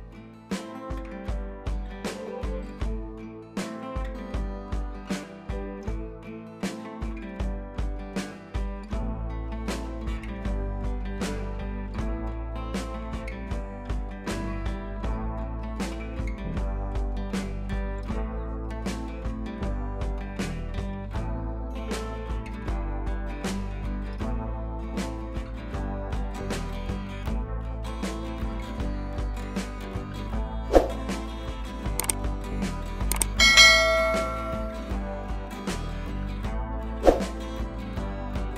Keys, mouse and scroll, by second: 5.9-6.6 click, 9.0-9.5 drag, 11.6 ctrl+Num_Lock, 11.6 click, 11.7 ctrl+z, 12.1 click, 13.8 ctrl+z, 14.3 click, 20.2 click, 21.1-21.8 alt+click, 24.1-26.7 drag, 27.3 ctrl+c, 27.5 click, 28.2 ctrl+v, 29.2 ctrl+a, 30.5-32.4 drag, 35.2 click.